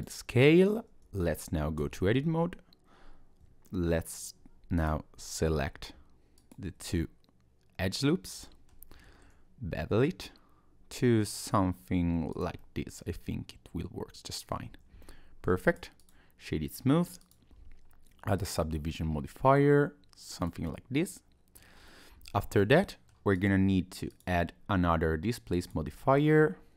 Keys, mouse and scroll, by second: 0.3 middle click, 1.8 Tab, 4.8 click, 5.2 alt+click, 6.4 alt+shift+click, 6.9 middle click, 9.0 ctrl+b, 12.6 middle click, 14.7 Tab, 15.0 scroll down 1, 15.6 right click, 17.2 click, 20.4 click, 20.7 middle click, 21.8 scroll up 1, 22.3 shift+middle click, 22.8 middle click, 23.4 click, 24.1 click.